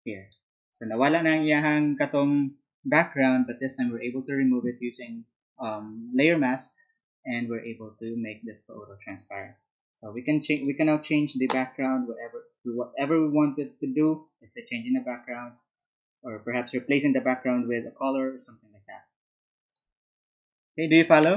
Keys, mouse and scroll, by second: 10.3 click, 12.1-17.3 drag, 19.6 click.